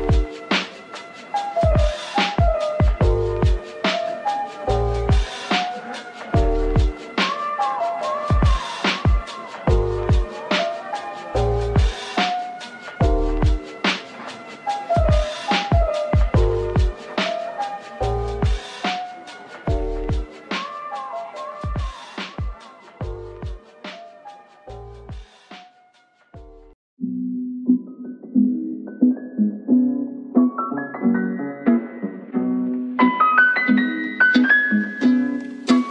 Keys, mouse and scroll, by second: 0.7 middle click, 1.7 typing, 3.0 right click, 7.6 Tab, 7.8 right click, 8.7 a, 9.0 right click, 10.8 Tab, 11.2 Tab, 11.7 right click, 12.7 middle click, 14.7 shift+right click, 15.2 a, 19.1 double click, 22.4 s, 24.0 double click, 24.3 scroll up 1, 24.6 middle click, 26.2 ctrl+l, 26.9 typing, 28.1-28.9 typing, 29.3 middle click, 31.6-32.5 typing, 35.2 typing.